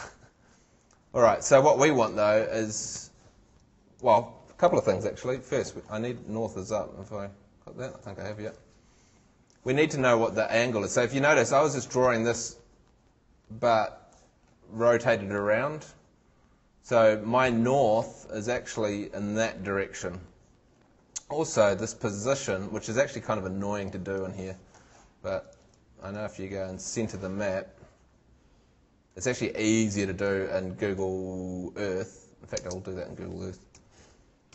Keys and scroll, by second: 32.6 super+space, 33.8 g.